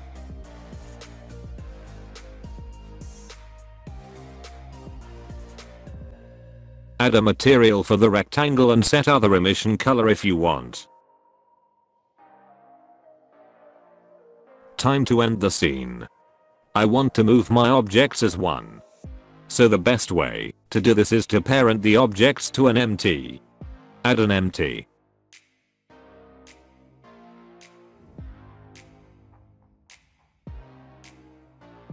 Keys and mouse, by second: 3.2 middle click, 4.0 middle click, 4.6 middle click, 4.9 middle click, 5.7 click, 6.1 click, 6.4 middle click, 6.7 middle click, 7.0 click, 7.8 alt+a, 8.7 click, 9.5 h, 10.2 click, 12.3 middle click, 13.0 middle click, 13.2 middle click, 13.6 alt+h, 14.0 alt+a, 14.1-14.5 middle drag, 14.6 alt+middle drag, 14.8 alt+middle click, 14.9 middle click, 15.6 middle click, 16.9 click, 17.4 middle click, 17.6 middle click, 18.3 click, 18.8 middle click, 20.7 shift+a, 26.2-26.7 middle drag, 28.0 middle click, 28.3 s, 28.9 alt+middle click, 29.0 alt+middle click, 29.3 g, 30.3 middle drag, 30.6 shift+middle click, 30.8 middle click.